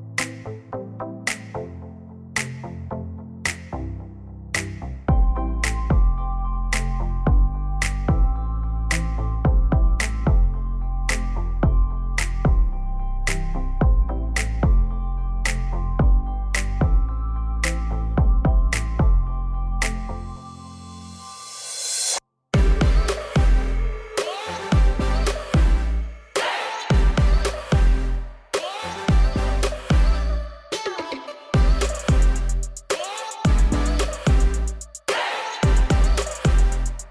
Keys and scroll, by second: 33.7 ctrl+shift+f.